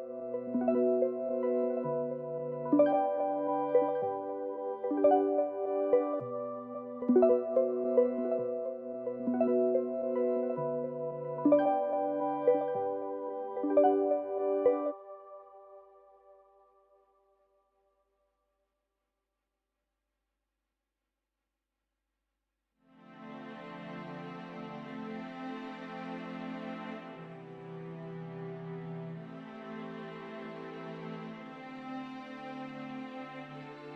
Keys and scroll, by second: 1.9 l, 6.4-6.9 typing, 8.4-10.5 typing, 11.7-14.5 typing, 18.3 Return, 27.9 n, 29.4 Return, 29.4 typing.